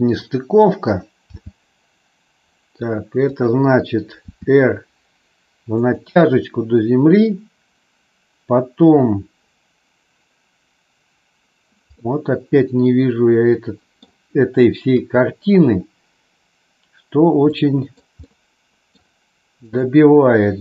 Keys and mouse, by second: 1.3 g, 3.3 click, 4.2 r, 5.8 click, 12.0-13.9 middle drag, 14.9 KP_3, 17.5 middle click, 18.2 middle click, 18.8 click.